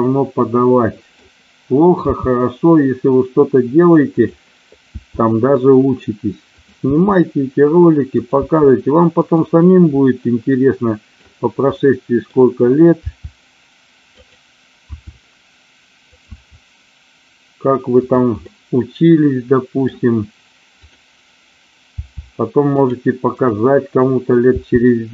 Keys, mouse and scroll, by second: 2.0 g, 4.1 click, 4.8 e, 6.8 e, 8.1 click, 8.3 e, 9.2 click, 10.4 middle click, 11.8 middle click, 12.9 g, 14.1 click, 14.8 e, 16.1 click, 16.2 e, 18.0 click, 18.4-19.9 middle drag, 22.0 g, 23.3 click, 24.4 g.